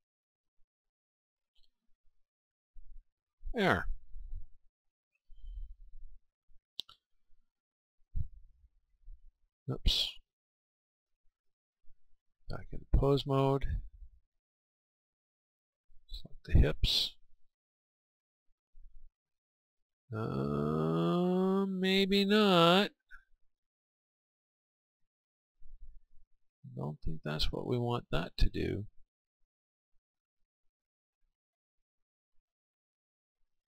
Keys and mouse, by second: 6.5-8.4 right drag, 8.2 r, 8.9 r, 9.6-13.1 right drag, 12.8-14.4 drag, 15.7-17.7 right drag.